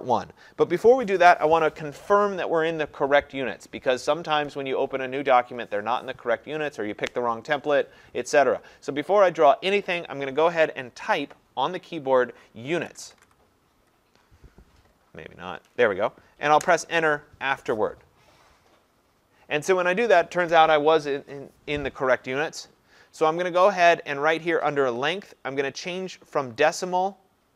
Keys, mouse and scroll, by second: 12.5-13.7 typing, 16.6 Return, 19.2 Return, 26.7 click.